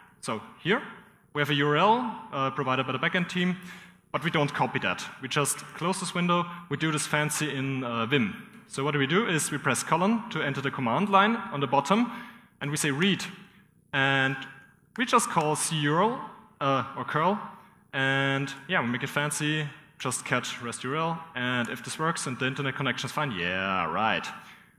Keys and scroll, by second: 0.0-0.2 typing, 6.0 ctrl+j, 9.3 …, 11.8-14.3 typing, 16.2 typing, 17.6-21.6 typing, 23.1 typing.